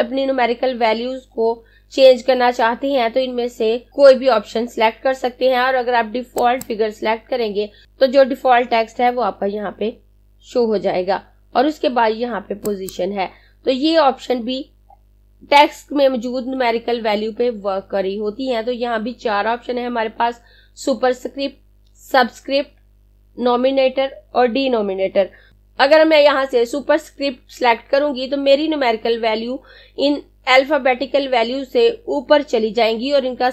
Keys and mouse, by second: 6.4 click, 12.6 click, 25.5 click.